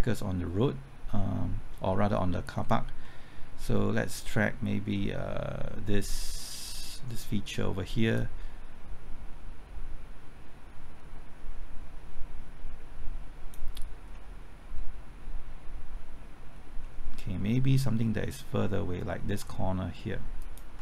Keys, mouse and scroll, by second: 3.0 middle click, 3.6 scroll up 1, 8.2-13.9 drag, 14.1 middle click, 14.8-16.8 scroll up 1, 16.8-18.9 middle drag, 20.4 ctrl+click.